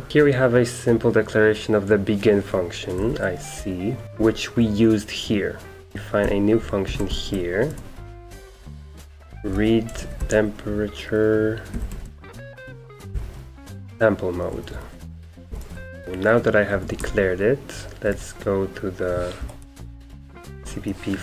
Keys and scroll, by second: 0.0-0.6 typing, 3.0 super+2, 3.5-4.2 typing, 4.0 Escape, 5.7-18.1 typing, 15.7 Escape, 19.4 Up, 19.8-21.2 typing.